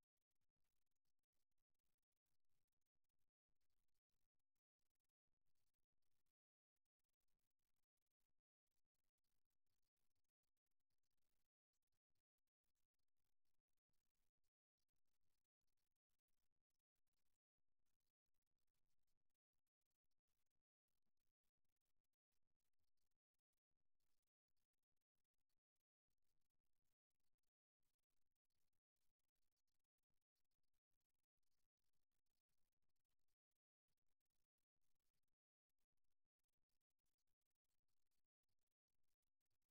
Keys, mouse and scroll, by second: 1.7-4.5 middle drag, 5.2-7.9 drag, 7.9-9.9 middle drag, 10.8-12.7 middle drag, 16.2-18.2 drag, 20.5-22.3 drag, 23.0 ctrl+z, 25.9-30.1 drag, 31.5-32.5 middle drag, 35.7-37.3 middle drag, 38.1-39.7 drag.